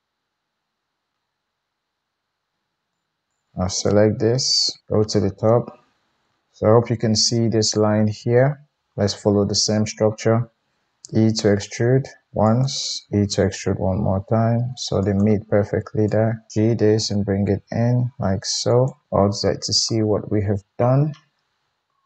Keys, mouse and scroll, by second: 2.9-12.6 drag, 3.2 ctrl+z, 4.8 KP_7, 10.8 e, 12.6-16.1 middle drag, 13.0 e, 16.1-18.8 drag, 16.5 g, 18.8-22.0 middle drag, 19.0 alt+z.